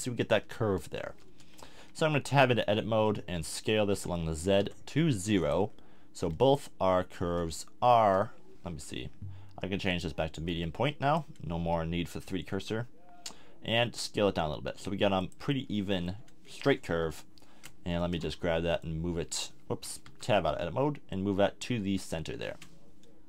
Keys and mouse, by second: 0.2-1.3 middle drag, 1.3 Tab, 1.7 a, 2.2 a, 3.4 s, 5.5 click, 7.2 s, 12.5 s, 15.3 click, 15.7-17.0 middle drag, 17.0 KP_7, 17.9 a, 18.1 a, 20.0 Tab.